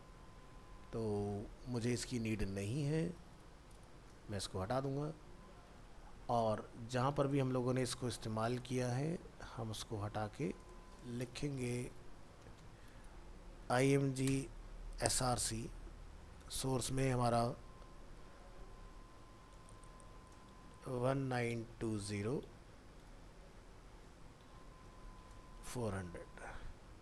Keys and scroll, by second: 5.8 ctrl+s, 16.4 ctrl+v, 26.0 ctrl+s.